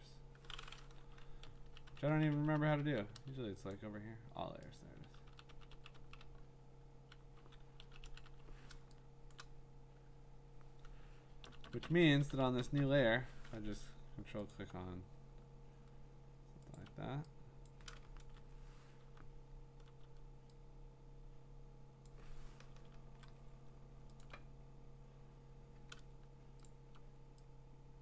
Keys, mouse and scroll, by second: 1.4-3.1 typing, 3.7 click, 4.8 click, 5.1-8.2 typing, 9.3 ], 9.3 click, 9.3 ], 11.4-13.0 typing, 14.5 alt+click, 16.8 alt+click, 17.7 click, 18.2 ctrl+z, 19.2-19.9 [, 20.1 [, 22.0 click, 23.0 ctrl+z, 24.2 alt+click, 26.7 alt+click.